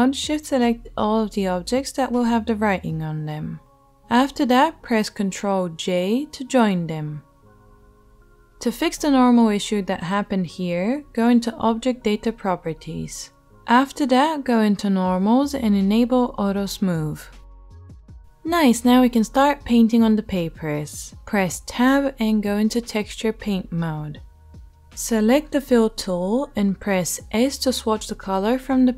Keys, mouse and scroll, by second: 2.6 right click, 3.0-22.8 shift+drag, 3.9 shift+right click, 6.0 ctrl+j, 12.6 middle click, 12.6 right click, 15.6 middle click, 15.6 right click, 20.7 Tab, 22.8 right click, 23.5-28.9 drag, 25.6 s.